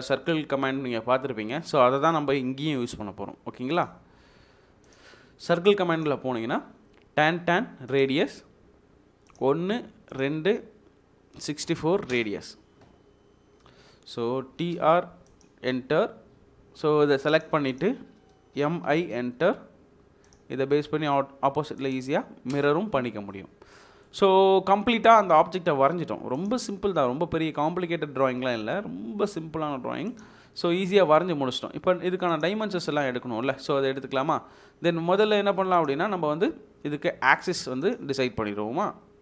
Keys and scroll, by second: 11.3 typing, 12.1 Return, 14.3-15.1 typing, 17.0 Escape, 18.8 typing, 22.5 space, 35.1 Escape, 35.6 Escape.